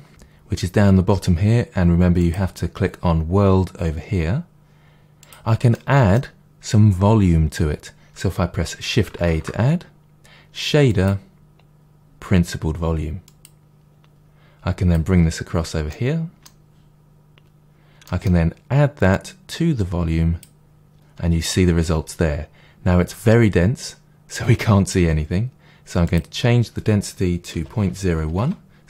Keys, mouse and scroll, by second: 2.2-5.6 drag, 5.6-10.0 middle drag, 9.2 shift+a, 10.0 click, 15.2-19.0 drag, 17.6 Return, 19.0-22.6 middle drag, 22.2-22.6 scroll up 2, 22.6 click, 26.0 click, 28.4-28.8 drag, 28.4 Return.